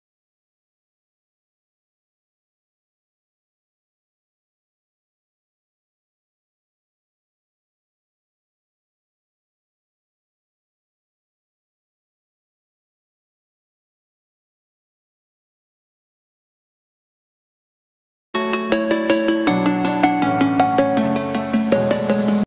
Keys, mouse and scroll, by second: 0.8 right click, 1.7 click, 2.5 middle click, 3.0 m, 3.2 click, 3.8 Escape, 4.2-4.6 scroll up 1, 4.6 middle click, 4.8 scroll down 1, 5.3 space, 5.9 click, 7.0 shift+click, 7.8 m, 9.4 Left, 9.9 click, 10.0 space, 10.2-10.9 scroll up 1, 10.9 m, 10.9 click, 12.4 space, 12.6 click, 12.9 scroll up 1, 13.2 middle click, 13.8 scroll up 1, 14.2 shift+middle click, 14.5 scroll up 1, 14.9 shift+middle click, 15.2 middle click, 15.5 scroll up 1, 15.9 scroll down 1, 16.2-17.8 shift+middle drag, 17.8 scroll up 1.